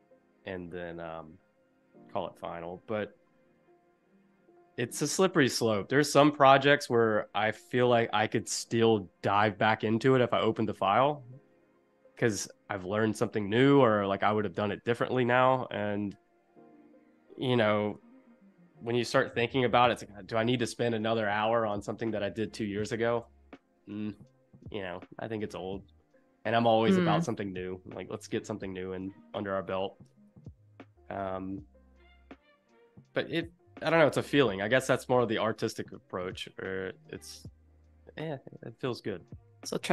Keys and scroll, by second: 1.9 Down, 3.5 Left, 4.4 Right, 6.1 Escape, 18.3 super+-, 19.6 space, 30.2 space.